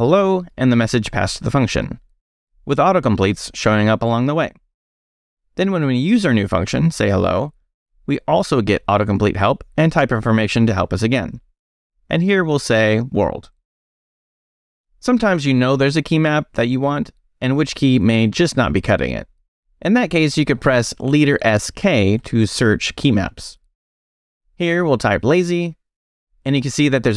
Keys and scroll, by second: 0.0-1.7 typing, 2.0 shift+Left, 2.8 Left, 2.9-6.3 typing, 4.5 Escape, 7.2 Escape, 8.0-10.7 typing, 12.1-14.5 typing, 13.2 Escape, 16.5 Escape, 17.1 shift+Escape, 17.2 shift+;, 17.5 shift+w, 17.6 Return, 21.5 space, 22.3 s, 23.6 k, 24.9-26.5 typing.